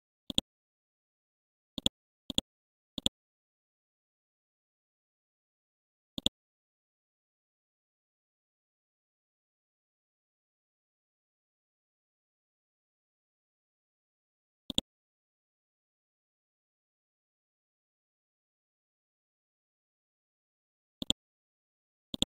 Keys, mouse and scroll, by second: 0.3 click, 1.7 shift+click, 2.1 shift+c, 2.3 click, 4.3 click, 6.8-7.5 scroll down 1, 7.5 scroll up 1, 12.5-12.9 scroll down 1, 13.9-14.7 scroll up 1, 14.7 click, 17.8-18.9 scroll up 1, 21.0 ctrl+click, 22.1-22.2 drag.